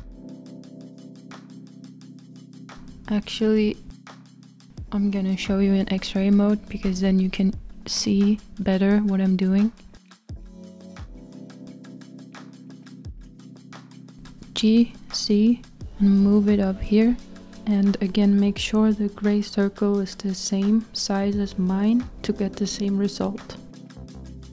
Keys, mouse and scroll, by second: 1.8 KP_1, 3.3-5.0 drag, 5.0-5.7 scroll up 1, 5.7-7.4 shift+middle drag, 7.4-9.7 scroll up 2, 9.7 g, 11.4 z, 13.3 ctrl+z, 14.9 g, 23.5-24.1 z.